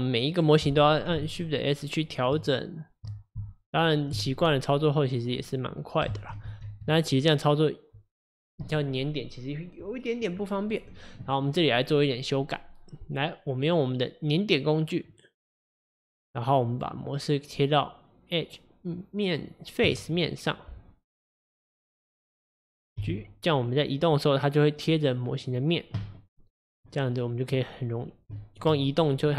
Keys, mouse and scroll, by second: 1.5-3.4 shift+right drag, 3.4 shift+s, 5.4 drag, 6.2 ctrl+z, 6.5 ctrl+z, 13.7 click, 15.7 click, 16.8-19.8 drag, 21.2 click, 21.7 click, 22.0 click, 23.1 g, 26.3 middle click, 26.6-27.2 scroll down 4, 27.2-27.7 middle drag, 27.7 scroll up 4, 28.4-29.3 shift+middle drag.